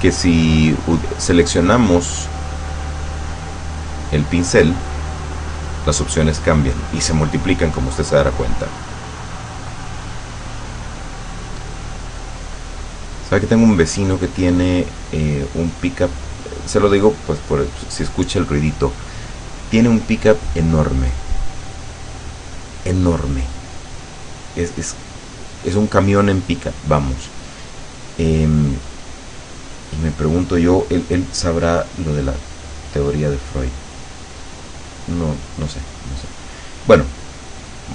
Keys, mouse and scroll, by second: 2.7 click, 5.5 click, 32.6 click, 33.1 click, 34.4 click, 37.5 click.